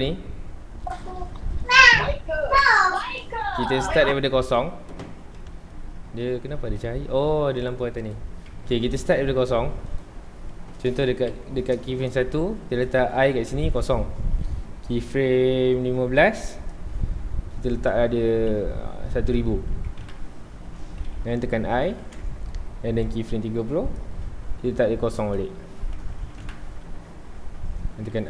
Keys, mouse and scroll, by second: 1.7-5.2 drag, 5.2-5.7 scroll down 2, 5.7-6.6 middle drag, 6.6 scroll down 1, 6.8-7.7 middle drag, 7.7 click, 7.8 x, 8.5 KP_0, 9.3 scroll up 1, 10.0 click, 11.2 shift+Left, 13.4 i, 15.1-20.0 drag, 20.0 KP_0, 20.1 KP_Enter, 21.6 i, 23.1-26.5 drag, 26.5 KP_Enter.